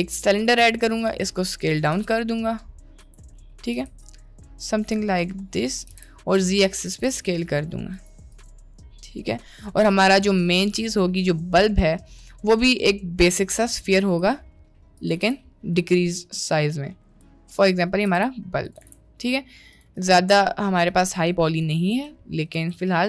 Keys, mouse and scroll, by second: 1.3 a, 2.0 s, 3.8 s, 6.0 s, 7.1 g, 8.3 click, 9.2-9.6 middle drag, 10.1 shift+a, 14.0 s, 15.2 g, 18.2 s, 18.8 g, 20.2-20.8 middle drag, 21.2 middle click, 22.0 Tab, 22.2 middle click, 22.6 Tab, 22.8 middle click.